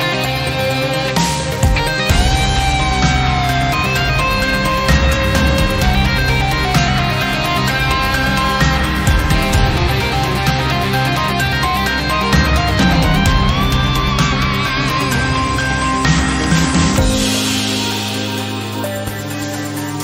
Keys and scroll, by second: 1.2 s, 7.5 e, 11.6 e, 15.3 ctrl+z, 17.6 s.